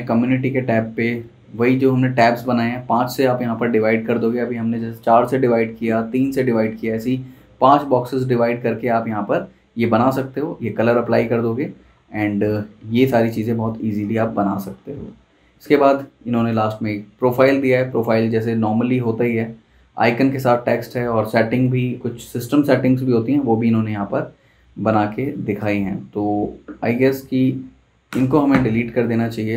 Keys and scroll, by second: 28.1 BackSpace.